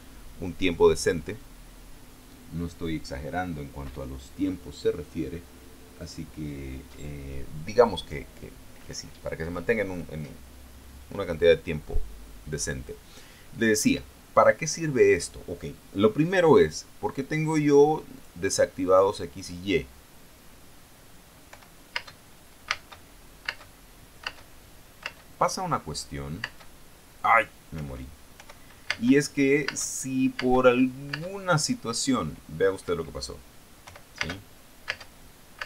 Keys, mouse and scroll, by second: 1.0 click, 18.7 click, 19.4 click, 22.0-25.6 typing, 26.9 space, 28.2 Escape, 28.9-31.7 typing, 33.4 Escape, 34.4 p, 34.7 space, 35.5 space.